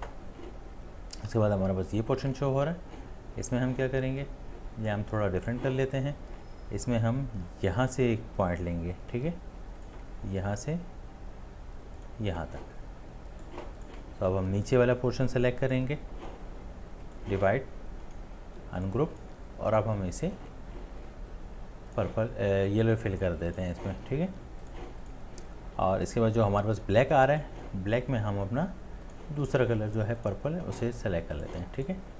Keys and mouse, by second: 18.1 right click.